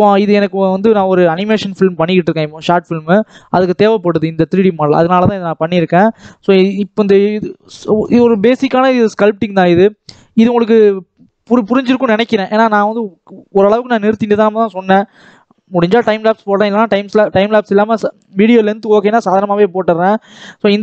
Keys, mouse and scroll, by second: 9.2 scroll up 1, 9.3-20.8 middle drag.